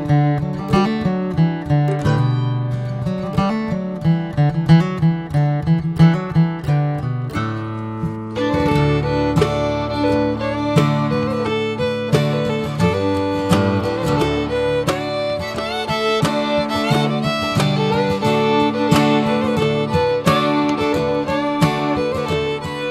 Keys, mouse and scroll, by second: 5.0 click, 5.9-7.3 middle drag, 7.3-13.0 drag, 14.0 scroll down 4, 14.2-14.8 middle drag, 14.8-15.5 drag, 18.2 middle click, 18.4 scroll up 3, 18.6-20.5 drag, 20.5-21.4 scroll down 1, 20.5 KP_0, 21.7-22.4 scroll up 1, 22.4-22.9 scroll down 2.